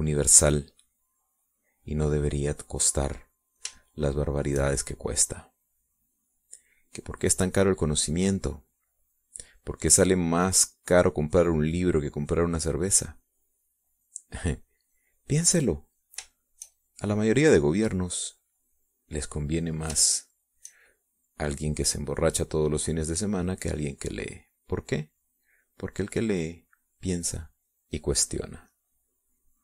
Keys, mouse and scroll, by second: 2.1-3.3 drag, 4.4-6.3 drag, 6.7-15.4 drag, 16.0 click, 16.9 click, 17.9-21.5 shift+drag, 21.6 shift+click, 22.5-28.9 shift+drag.